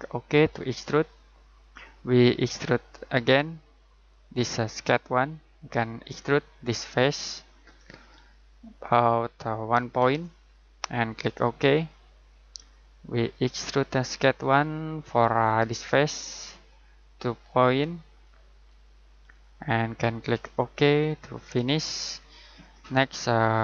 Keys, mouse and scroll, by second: 7.7 click, 10.0 1, 11.0 click, 18.5 2, 19.3 click, 22.1 scroll down 1.